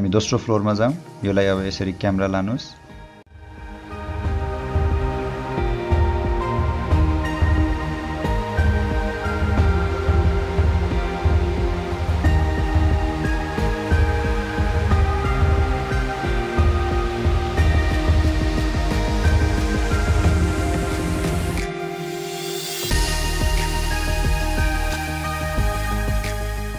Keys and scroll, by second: 2.3 h, 3.5-8.4 typing, 9.5 h, 10.7-16.1 typing, 19.6-21.6 typing, 22.7-25.2 typing.